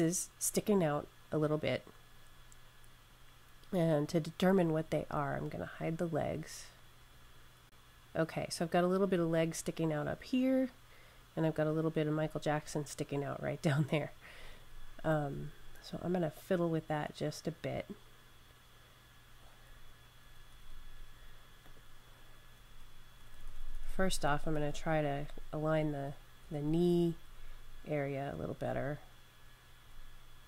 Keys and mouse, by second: 6.0 click, 9.6 click, 20.1 Up, 20.6 Up, 21.5 click, 22.5 Up, 22.7 Up, 23.2 Up, 23.4 Up, 23.4 Up, 23.6-24.0 Up, 24.9 Up, 25.0 Up, 25.4 Up, 25.6 Up, 25.8 Up, 26.3 Left, 26.5 Left, 26.9 Left, 27.0 Left, 27.3 Left, 27.5 Left, 28.4 Right, 29.6 Right.